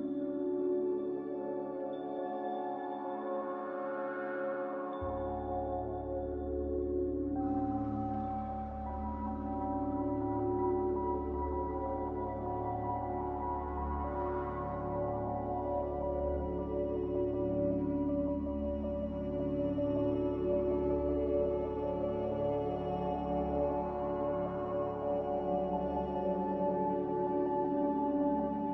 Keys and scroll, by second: 6.7 f, 7.2 m.